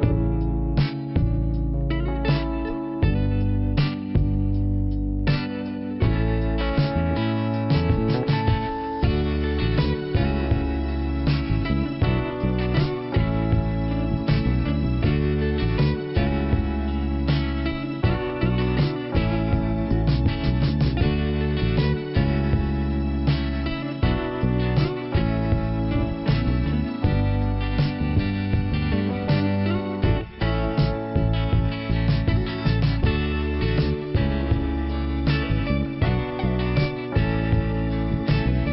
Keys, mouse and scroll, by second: 0.1 click, 5.2 shift+Return, 6.4 click, 6.6 click, 6.8 click, 6.9 double click, 7.7 double click, 9.7 click, 12.8 scroll up 2, 12.9 click, 16.9 click, 17.0 click, 17.6 click, 17.7 click, 19.6 click, 19.6 click, 20.0 click, 20.1 click, 21.1 click, 21.2 click, 22.9 click, 23.0 click, 23.4 click, 23.5 click, 24.6 click, 34.7 click, 38.2 shift+Return.